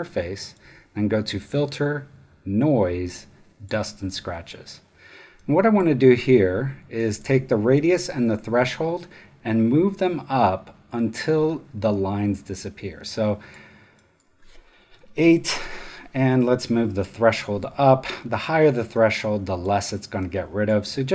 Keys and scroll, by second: 14.9 8.